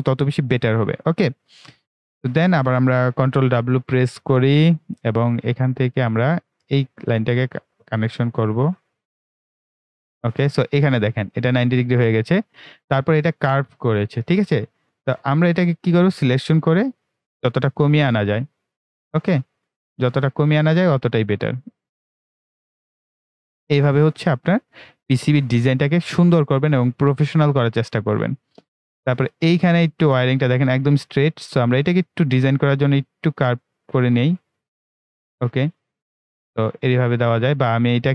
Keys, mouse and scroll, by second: 0.6-2.1 right drag, 2.1-3.0 scroll up 1, 3.6 ctrl+w, 5.6 click, 10.6-11.0 ctrl+scroll up 1, 12.8 ctrl+scroll up 1, 14.4 ctrl+scroll down 1, 14.8 right click, 15.6-23.0 drag, 23.5-24.2 scroll down 2, 26.5-28.6 right drag, 28.6 ctrl+right click, 29.4-29.9 ctrl+scroll up 1, 31.5-36.1 drag, 36.1 scroll down 1, 36.4-36.8 ctrl+scroll up 1, 37.4-38.0 ctrl+scroll down 1, 38.0 click.